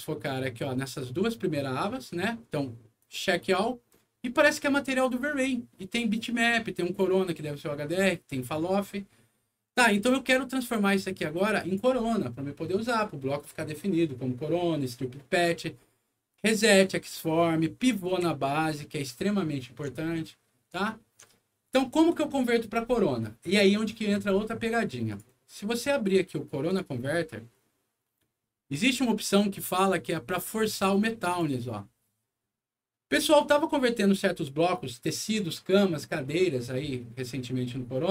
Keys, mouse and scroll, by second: 3.0 click, 10.1 click, 11.1 click, 16.3 click, 17.8 middle click, 18.1 w, 18.5-19.7 alt+middle drag, 20.1 alt+middle click, 20.8 alt+middle click, 21.5 alt+middle click, 25.1 click, 26.6 click, 28.1 click, 31.2 click.